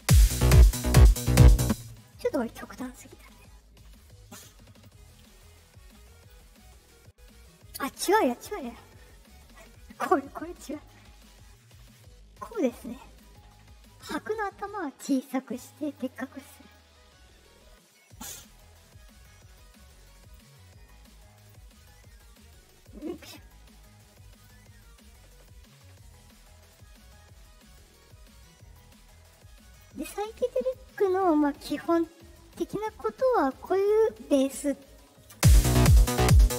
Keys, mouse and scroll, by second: 1.5 space, 3.3-4.7 drag, 5.3 click, 9.5-10.8 drag, 11.5-12.5 drag, 13.3-15.9 drag, 16.6-18.3 drag, 18.9-20.3 drag, 20.6 click, 22.8-24.3 drag, 25.3-26.6 drag, 27.6-28.7 drag, 29.2 click, 30.2 click, 31.6-33.8 drag, 35.3 space.